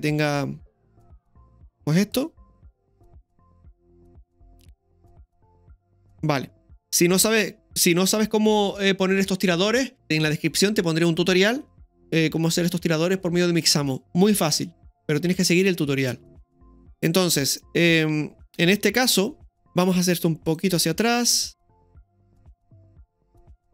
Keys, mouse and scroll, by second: 0.8 click, 2.2-10.0 drag, 20.5 right click, 21.4-23.7 drag, 21.4 right click.